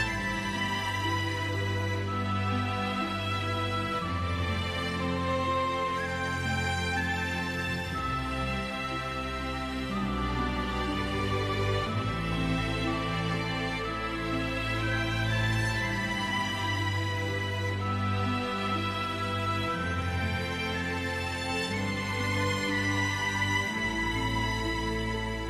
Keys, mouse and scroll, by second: 0.3-0.7 scroll down 1, 0.9 alt+middle click, 3.3-3.9 scroll up 1, 5.8 middle click, 5.9-6.7 typing, 8.0-8.9 scroll down 1, 9.4 click, 10.7 scroll down 1, 11.5 click, 13.4 Delete, 16.5 click, 18.1 Delete, 18.8-19.1 scroll down 1, 20.3 click, 21.8 t, 22.8-24.4 scroll down 1, 24.4 click.